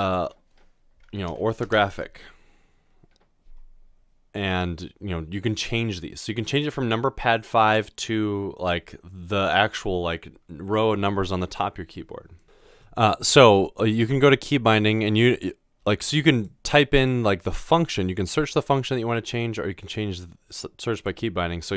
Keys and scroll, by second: 1.1-1.8 typing, 12.4 BackSpace.